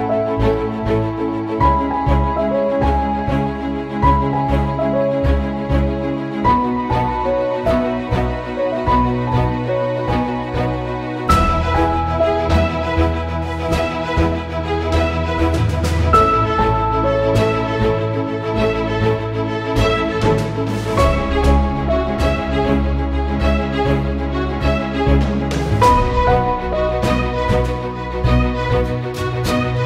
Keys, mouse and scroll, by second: 1.7 Return, 3.1-5.5 drag, 6.0 Return, 7.0 click, 9.7 Return, 10.5 click, 12.6 click, 14.9 Return, 16.6 click, 19.3 click, 20.2 ctrl+f, 21.7 ctrl+z, 23.8 ctrl+shift+z, 24.4 click, 24.6 right click, 25.3 click.